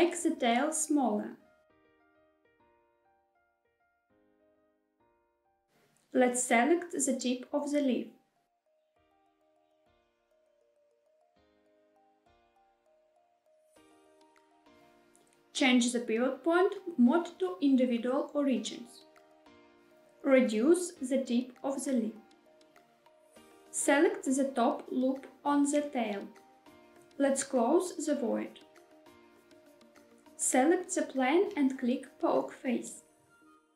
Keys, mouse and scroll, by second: 0.8 shift+click, 1.0 shift+click, 1.8 shift+click, 2.0 shift+click, 2.6 s, 4.8 click, 5.4 middle click, 7.1 click, 7.3 click, 8.0 middle click, 9.5 shift+click, 10.1 middle click, 10.4 shift+middle click, 10.7 middle click, 11.0 shift+middle click, 11.8 shift+click, 12.3 shift+click, 12.5 shift+click, 12.7 middle click, 12.9 shift+middle click, 13.1 middle click, 13.7 shift+click, 13.8 shift+click, 15.3-16.5 drag, 17.3 s, 22.5 click, 23.0 middle click, 23.3 scroll up 3, 23.3 shift+middle click, 23.8 middle click, 25.4 click, 25.6 click, 27.4 f, 28.8 click, 30.0 3, 30.6 click, 31.5-33.7 right drag.